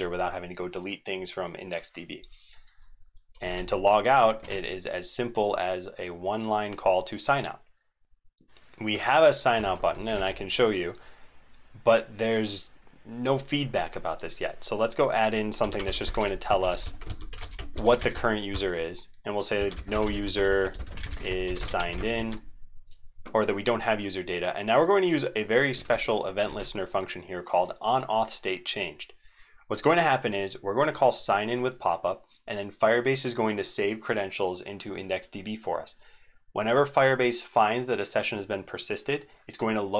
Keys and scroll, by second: 3.4 ctrl+v, 4.4 ctrl+s, 8.5 ctrl+Tab, 8.5 ctrl+c, 9.6 super+1, 10.1 ctrl+r, 25.8 ctrl+v, 26.4 ctrl+s.